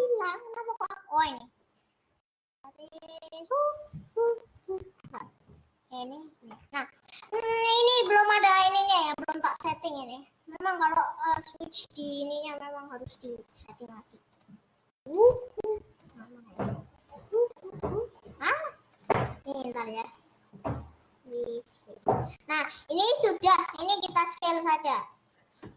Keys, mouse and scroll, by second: 0.0-7.3 drag, 7.3 middle click, 7.5-7.9 scroll up 7, 7.9-9.9 scroll down 4, 8.1 middle click, 12.0-16.8 drag, 22.3-22.8 scroll up 4, 22.8 middle click, 23.3-23.7 scroll down 3, 23.7-25.7 middle drag.